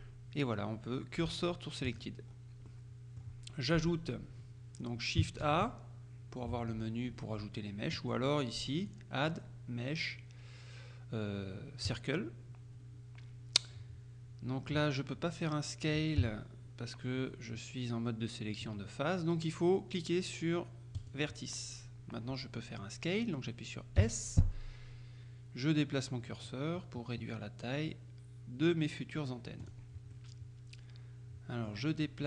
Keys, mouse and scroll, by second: 1.9 click, 2.4-2.8 scroll up 2, 2.8 middle click, 5.5 shift+a, 8.9 click, 12.0 click, 16.2 s, 21.0 click, 24.1 s, 29.7 click, 30.2 right click.